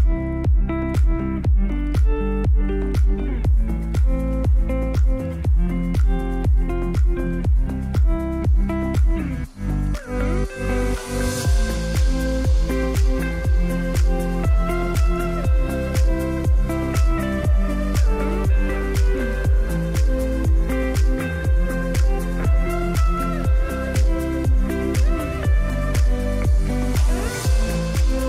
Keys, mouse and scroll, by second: 6.8 space, 10.8 space, 11.4-13.0 drag, 25.5-27.1 typing, 28.1-28.2 drag.